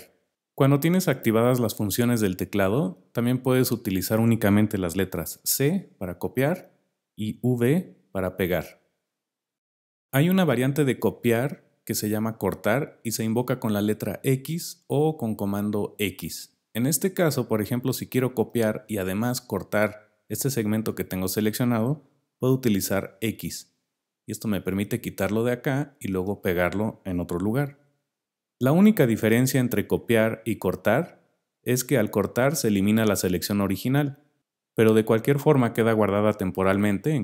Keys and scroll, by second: 5.4 c, 7.7 v, 23.1 x, 27.7 v.